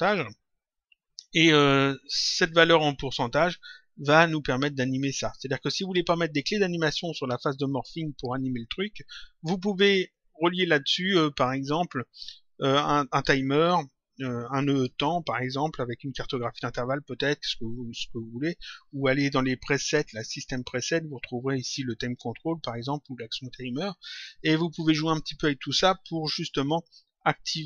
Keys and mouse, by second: 20.0 click, 24.0 click.